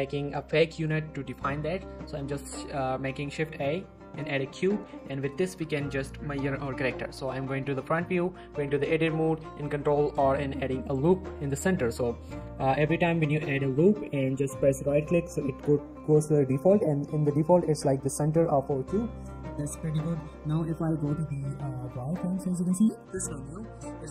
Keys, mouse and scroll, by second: 1.6 scroll down 1, 1.9 middle click, 3.4 shift+a, 4.2 click, 4.7 g, 5.0 right click, 5.2 middle click, 5.4 g, 5.6 right click, 7.7 shift+middle click, 7.9-8.6 scroll up 1, 8.6 Tab, 9.8 ctrl+r, 10.8 click, 11.0 right click, 12.6 ctrl+z, 13.1 ctrl+r, 13.7 click, 15.0 right click, 16.7 middle click, 19.6 Tab, 21.9-22.8 z.